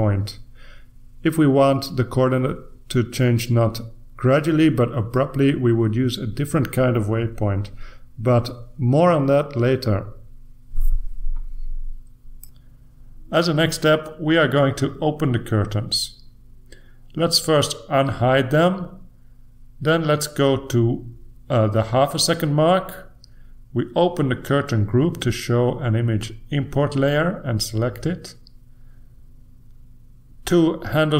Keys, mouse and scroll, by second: 3.5 click, 4.6 click, 14.6 click, 17.4 click, 21.8 click, 25.8 click, 27.1 click.